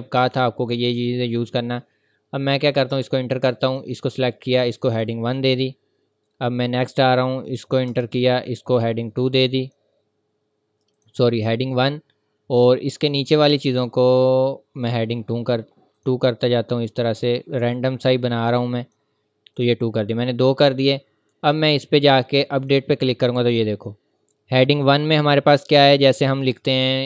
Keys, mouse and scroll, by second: 2.6 click, 2.9 Return, 3.7 click, 5.4 scroll down 1, 6.5-7.3 scroll up 1, 7.6 click, 7.9 Return, 8.6 click, 11.7-12.8 scroll up 1, 12.8 scroll down 1, 13.6 click, 16.5-17.0 scroll down 1, 18.1 click, 19.9-20.3 scroll up 1, 21.7 click, 23.4-24.0 scroll down 1, 24.5 click.